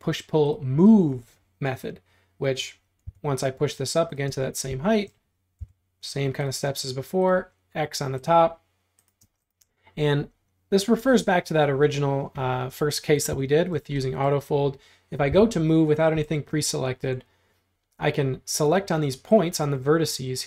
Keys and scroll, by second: 3.1 p, 4.3 space, 5.6 l, 9.3 space, 15.3 m.